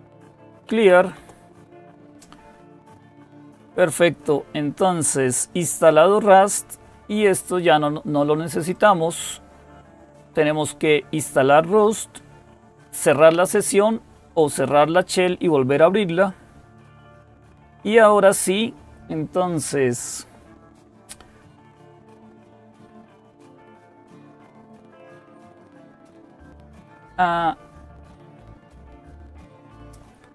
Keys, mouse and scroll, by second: 0.0-1.1 typing, 6.0 click, 8.5 click, 16.3-16.9 scroll down 1, 16.9-18.5 scroll down 1, 25.3 click.